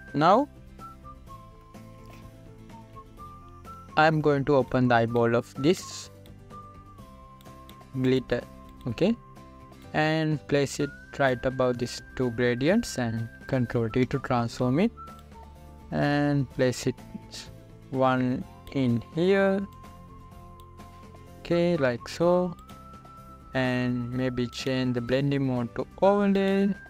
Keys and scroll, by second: 15.4 ctrl+t.